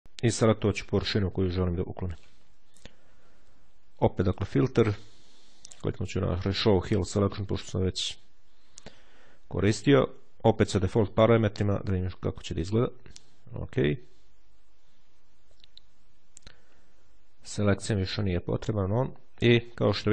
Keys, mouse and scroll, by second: 3.9 click, 6.2 click, 11.5-13.3 drag, 17.8 click, 18.5 click.